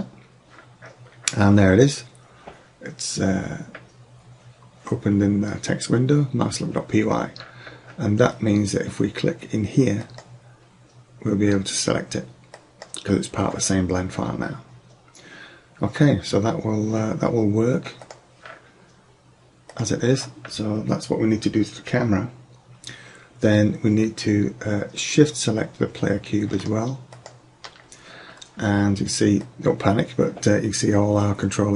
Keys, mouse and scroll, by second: 0.0-1.6 drag, 10.1-11.6 drag, 18.1-19.7 drag, 21.6-27.2 middle drag, 29.1 middle click, 30.9 click, 31.1 middle drag.